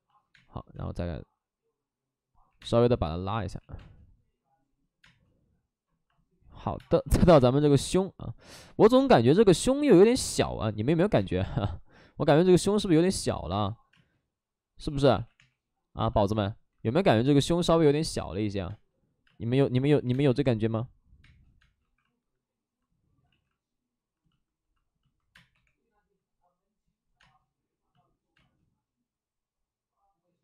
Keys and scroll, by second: 0.2 space, 0.7 space, 2.4 3, 2.5 space, 3.5 ctrl+z, 3.7 space, 6.6 3, 6.7 space, 7.6 3, 8.7 ctrl+z, 8.8 space, 11.0 2, 15.0 ctrl+z, 15.0 space, 15.3 3, 18.6 space, 19.9 2, 20.0 space, 21.2 space, 21.7 1, 25.2 ctrl+z, 25.2 space, 27.1 space, 27.1 3, 28.3 space.